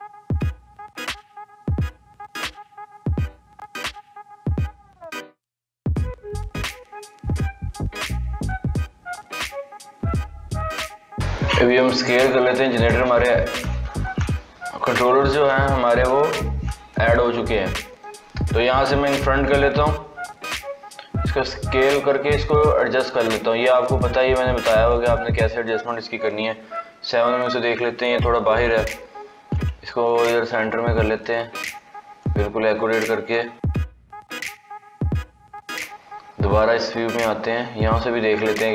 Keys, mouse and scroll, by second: 5.8-6.3 shift+middle drag, 6.3-8.3 drag, 8.3-9.0 scroll down 7, 9.3-10.6 middle drag, 10.6 KP_3, 12.0 s, 19.1 click, 20.4-21.5 scroll up 1, 21.5 s, 26.2 KP_7, 27.3-28.2 scroll up 1, 28.7 g, 31.5-33.3 scroll up 10, 33.3 g, 35.6 KP_3, 36.2-37.1 scroll down 12, 37.1 scroll up 7, 37.8-38.5 shift+middle drag, 38.5 scroll up 5.